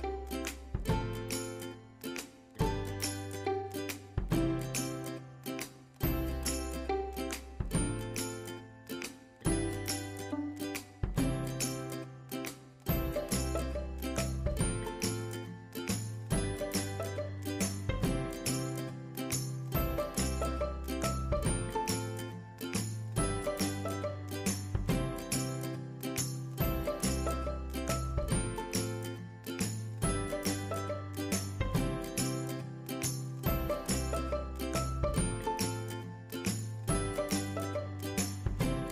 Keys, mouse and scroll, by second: 1.5 click, 1.5 typing, 5.8-16.0 drag, 10.4 typing, 16.1-19.9 drag, 19.8 typing, 19.9-23.0 drag, 24.2 click, 24.2-24.6 typing, 24.3-27.6 drag, 27.0 typing, 27.6-33.6 drag, 33.6-35.3 drag, 35.3 space, 35.7 click, 37.3-38.9 typing, 37.9 ctrl+click.